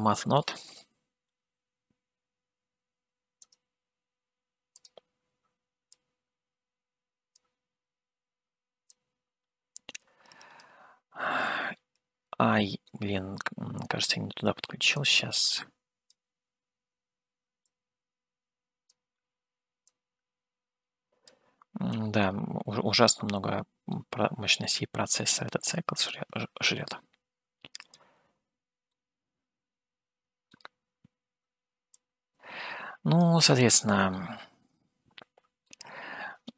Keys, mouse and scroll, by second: 6.5-7.6 drag, 9.1-10.7 drag, 13.1-14.4 middle drag, 15.5 click, 17.9-19.0 drag, 20.2-25.5 drag, 25.5 middle click, 26.2-28.5 drag, 28.9-30.8 middle drag, 32.5-33.6 drag, 34.4-35.9 middle drag.